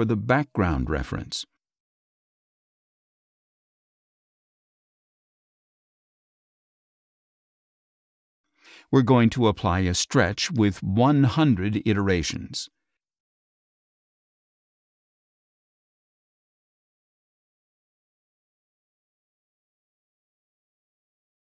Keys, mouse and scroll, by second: 1.4-2.9 drag, 4.0 click, 4.8-6.6 drag, 8.2 click, 10.9 click, 13.3 click.